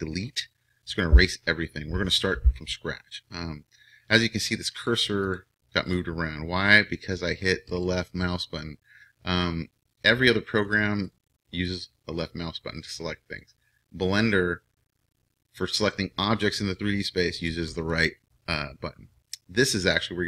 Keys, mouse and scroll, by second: 4.8-17.7 drag, 17.7-20.2 right drag.